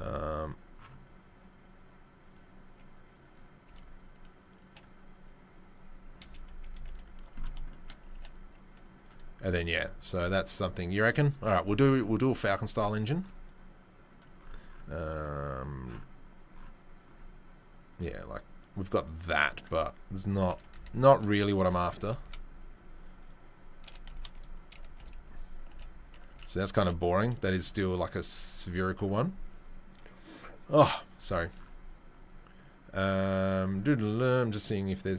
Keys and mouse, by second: 0.3 right click, 0.5-2.3 middle drag, 2.3-3.2 right drag, 3.2-17.9 middle drag, 3.6 s, 6.2 KP_3, 6.6 KP_1, 8.1 g, 17.9 click, 18.0-18.3 middle drag, 18.3-19.4 drag, 19.4-22.2 middle drag, 20.5 r, 22.0 t, 22.2 z, 23.2-35.1 middle drag, 23.8 r, 25.7 g, 26.3 s, 26.8 g, 27.6 s.